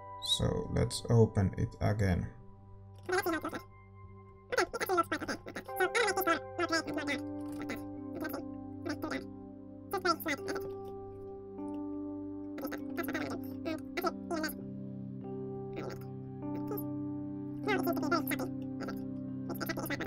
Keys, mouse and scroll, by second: 3.2 ctrl+s, 3.2-20.0 middle drag, 3.7 shift+z.